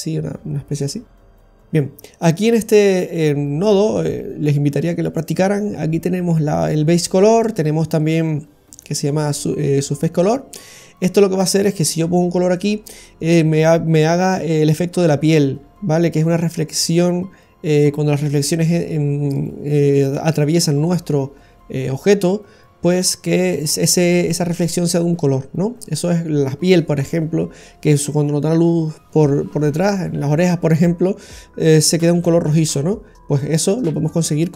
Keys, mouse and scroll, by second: 1.7-2.2 scroll down 1, 2.9-4.4 scroll down 3, 8.7 middle click, 8.7 scroll up 5.